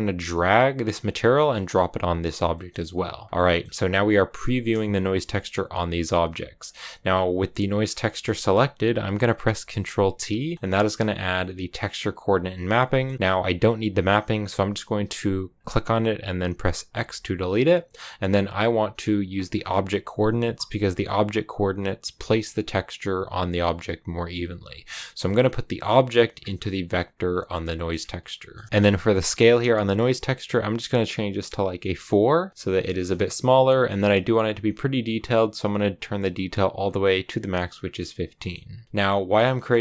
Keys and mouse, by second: 2.5 middle click, 3.1 click, 3.4 middle click, 6.5 click, 7.7 click, 10.0 ctrl+t, 10.7 click, 12.8 click, 13.5 click, 14.5 click, 15.5 click, 16.9 x, 18.1 click, 19.3 click, 24.5-26.2 drag, 26.9 click, 27.6 middle click, 28.4 middle click, 30.4-32.4 drag, 35.1-36.7 drag, 38.3 middle click, 38.8 click.